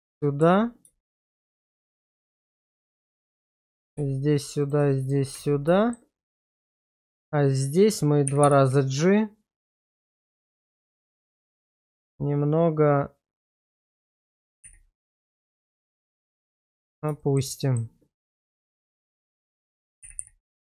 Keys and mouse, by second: 0.4 1, 1.0 shift+middle click, 1.5 shift+middle click, 1.9 shift+middle drag, 2.3 shift+middle click, 4.0 1, 5.3 1, 5.8 shift+middle click, 8.3 g, 8.4 g, 11.0 click, 14.5 g, 14.6 g, 16.5 click, 17.2 shift+middle drag, 17.6 middle drag, 18.5 middle drag, 20.0 g, 20.2 g.